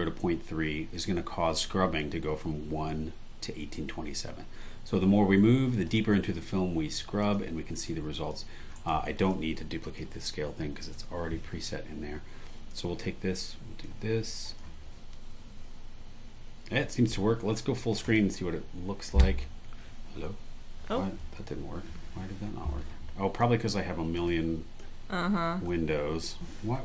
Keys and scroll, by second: 8.7 super+e, 11.0 BackSpace, 18.8 Escape, 21.3 Escape.